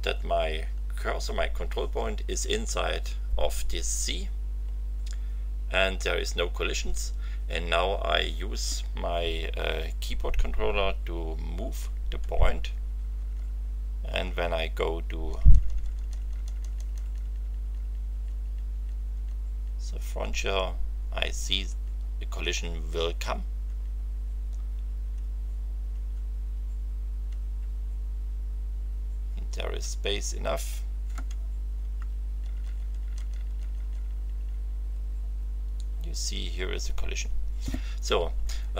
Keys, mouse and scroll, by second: 11.7 t, 21.6 t, 23.6 t, 25.9 f, 27.6 c, 31.9 t.